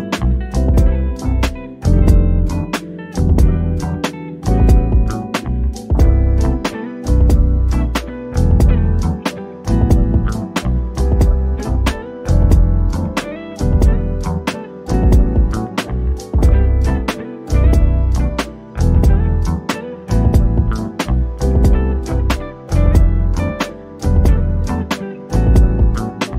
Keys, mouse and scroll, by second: 0.4 middle click, 2.7 click, 6.7-7.2 scroll up 1, 8.1 scroll down 1, 9.1 click, 11.3 scroll down 1, 14.1 click, 15.8-17.2 scroll down 1, 19.1 click, 22.1 click, 25.0 click.